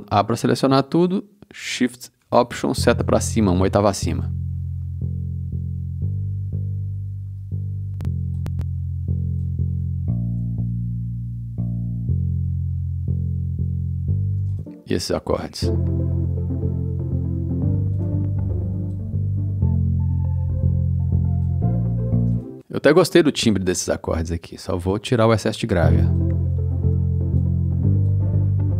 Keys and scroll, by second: 5.0 space, 7.2 e, 14.4 space, 25.7 space.